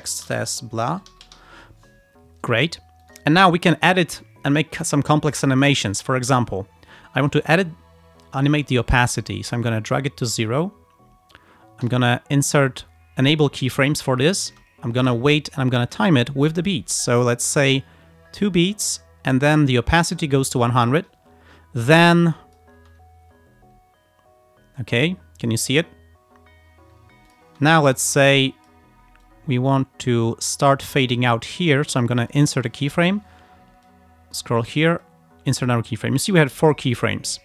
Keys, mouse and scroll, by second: 0.0-1.9 typing, 3.1 click, 3.5 click, 5.6 alt+click, 9.7 click, 11.9 click, 14.5 space, 15.3-15.6 ctrl+scroll up 2, 16.0-19.1 ctrl+drag, 19.7 click, 22.0 click, 22.4 click, 22.8 space, 27.3 click, 27.5 space, 27.8-28.9 drag, 29.3-31.3 drag, 32.4 click, 33.9 click, 35.1 click, 36.4 click, 37.0 click.